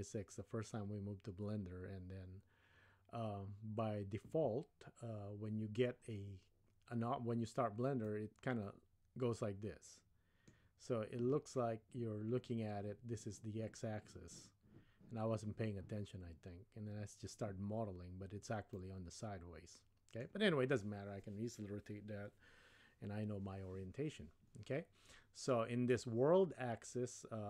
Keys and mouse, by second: 8.1-10.8 middle drag, 18.8-20.2 middle drag.